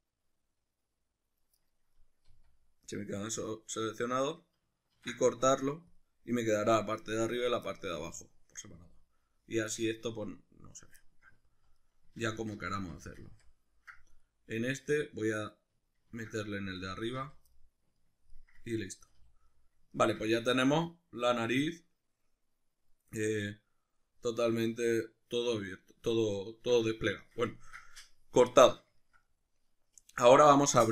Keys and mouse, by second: 1.6 right click, 1.9-4.6 middle drag, 2.3 z, 5.0 ctrl+e, 7.7 middle click, 8.8 z, 11.1-30.9 middle drag, 11.5 z, 12.2 ctrl+z, 16.1 ctrl+e, 17.2 z, 19.1 a, 30.2 a.